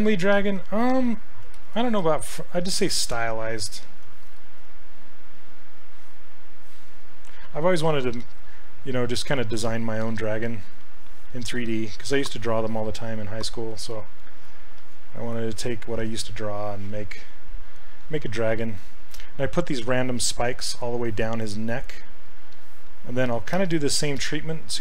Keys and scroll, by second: 1.6 shift+f.